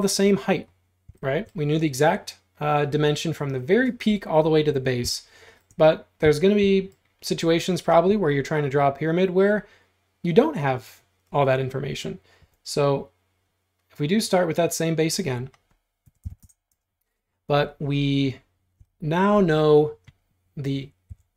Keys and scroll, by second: 12.5 r, 15.9-16.9 typing, 21.1 l.